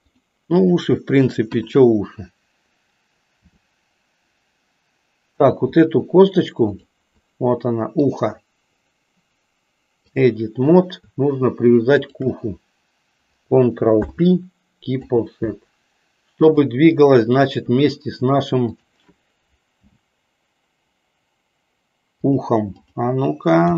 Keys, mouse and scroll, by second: 1.5 KP_1, 3.4 r, 6.5 click, 8.2-10.3 drag, 11.9 shift+click, 13.9 ctrl+p, 16.4-17.5 drag, 18.7 click, 19.8 g, 22.8 click, 23.6 g.